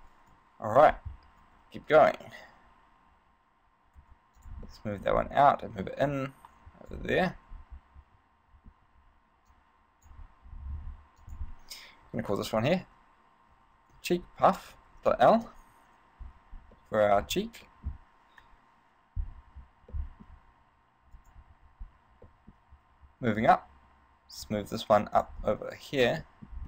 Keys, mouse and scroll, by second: 0.5 KP_1, 1.7 shift+d, 4.6 click, 4.9 middle click, 5.4-6.2 scroll up 3, 6.3 click, 7.3 middle click, 9.6 click, 11.4 click, 17.0 middle click, 17.9 middle click, 18.6 KP_1, 19.7 z, 20.1 shift+middle click, 20.6 z, 21.4 right click, 22.0 scroll down 1, 22.4 shift+middle click, 23.8 shift+d, 25.4 click, 25.8 middle click, 26.4 middle click.